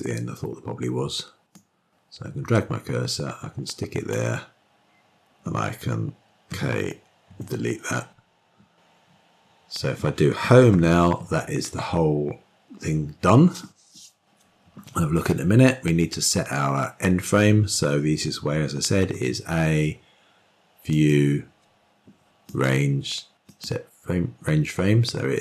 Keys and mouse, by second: 2.3-4.9 drag, 7.3 k, 8.0 Delete, 11.4 Home, 19.8 a, 21.7-24.5 drag.